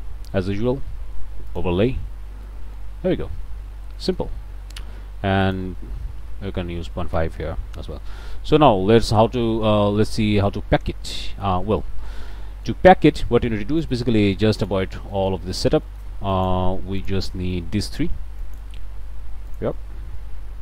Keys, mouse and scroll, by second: 1.5 click, 2.5 click, 3.0 scroll down 1, 3.2 click, 3.3-3.8 scroll up 1, 4.0 click, 4.3 scroll down 1, 5.4 click, 6.9 KP_5, 7.1 KP_Enter, 8.3-8.8 scroll up 2, 9.3 scroll down 1, 9.9 scroll up 1, 11.4-12.0 scroll down 2, 12.3 click, 12.4 middle click, 12.8 scroll down 1, 13.1 middle click, 13.8-14.9 drag, 15.1 middle click, 15.9 middle click, 16.3 click, 17.0 click, 17.9 click, 18.4 click, 19.5 click, 19.9 middle click, 20.2 click, 20.4 middle click.